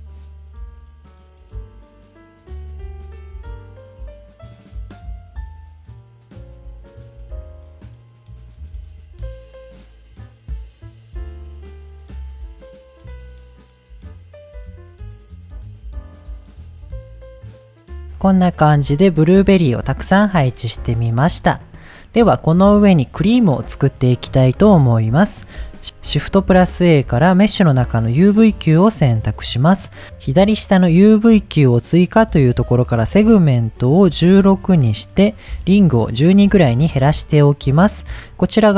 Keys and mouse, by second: 0.0-15.8 typing, 0.0 click, 0.1 click, 0.3 middle click, 0.5 middle click, 0.7 middle click, 1.0 click, 1.0 middle click, 1.1 click, 1.3 middle click, 1.6 middle click, 2.0 click, 2.1 middle click, 2.3 middle click, 2.5 middle click, 3.3 click, 3.9 click, 3.9 middle click, 4.0 click, 4.1 middle click, 4.2 click, 4.2 middle click, 4.4 middle click, 4.5 click, 4.6 middle click, 5.0 middle click, 5.1 click, 5.5 middle click, 5.7 click, 6.0 click, 6.3 click, 6.5 click, 6.5 middle click, 6.7 middle click, 6.8 shift+middle click, 7.3 click, 7.5 right click, 7.7 ctrl+click, 8.1 click, 8.5 shift+click, 9.0 click, 9.2 middle click, 9.5 shift+click, 9.8 click, 10.1 middle click, 10.3 middle click, 10.5 middle click, 10.6 click, 10.7 click, 11.3 middle click, 11.5 middle click, 12.3 middle click, 12.4 click, 13.0 click, 14.8 click, 15.1 middle click, 16.0-17.2 shift+middle drag, 17.3 ctrl+s, 20.9-21.3 middle drag, 26.7 shift+a, 33.1-35.4 drag, 35.7-38.0 drag.